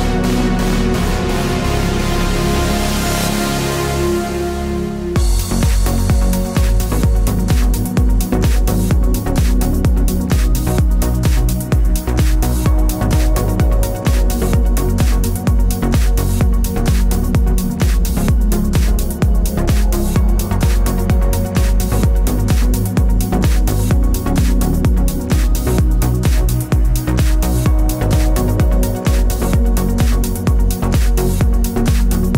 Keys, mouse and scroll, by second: 0.1 KP_7, 0.8 Tab, 1.2 click, 1.4 shift+click, 3.0 shift+click, 3.6 Tab, 6.2-9.9 middle drag, 6.8 scroll down 1, 7.4 z, 11.6 scroll down 1, 11.7 scroll up 1, 12.0 z, 12.7 middle click, 16.0 middle click, 16.5 click, 17.1-19.3 middle drag, 18.1 g, 19.3 click, 19.4-22.1 middle drag, 21.4 g, 22.1 click, 22.2-26.1 middle drag, 24.2 Tab, 25.3 shift+s, 26.1-28.2 right drag, 28.2-29.8 drag, 30.0 click, 30.3-32.3 middle drag, 30.8 scroll down 1, 31.8 alt+h.